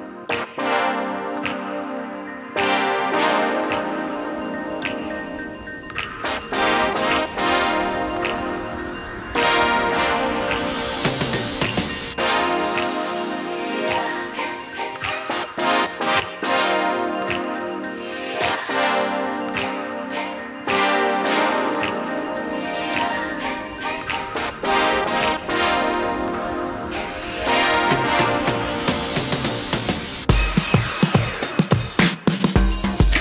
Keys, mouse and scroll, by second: 5.1-6.4 scroll up 2, 6.4 click, 7.6-8.6 drag, 9.2-9.5 scroll up 2, 9.9-11.2 scroll down 2, 11.2 click, 12.6 click, 14.0-16.7 drag, 16.7 Tab, 18.7 a, 20.5 click, 21.9 shift+g, 23.9-25.7 drag, 25.7 s, 28.7 Tab, 29.8 click, 32.0 click, 32.7-33.2 scroll down 1.